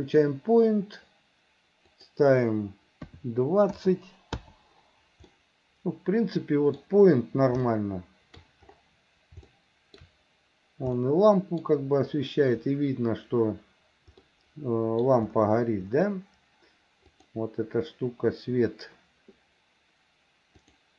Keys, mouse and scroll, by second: 2.0-4.4 drag, 5.4-6.8 middle drag, 7.7 shift+middle click, 9.6 shift+middle click, 11.1 middle click, 14.3 middle click, 17.2 click, 20.8 click.